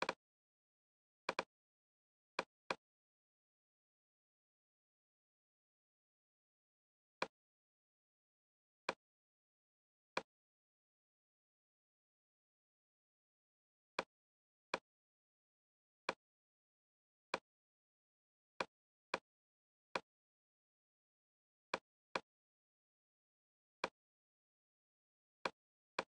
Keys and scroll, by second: 4.5 super+d.